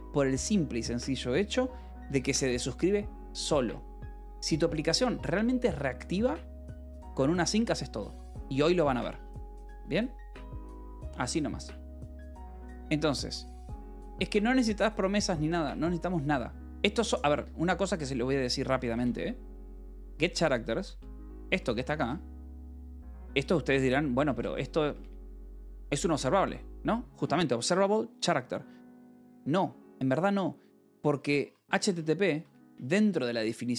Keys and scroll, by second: 17.8-22.0 typing, 18.8 Return, 24.0-26.4 typing, 31.5-32.9 typing.